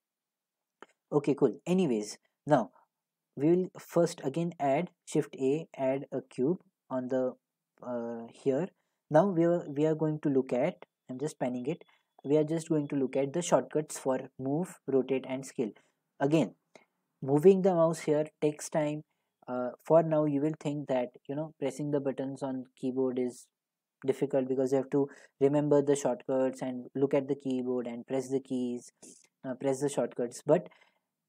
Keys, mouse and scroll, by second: 0.1 click, 0.2 click, 1.1 middle click, 1.8 click, 2.7 Delete, 3.5 a, 6.2 click, 9.6 click, 11.9 shift+middle click, 28.0 s, 29.8-31.2 right drag.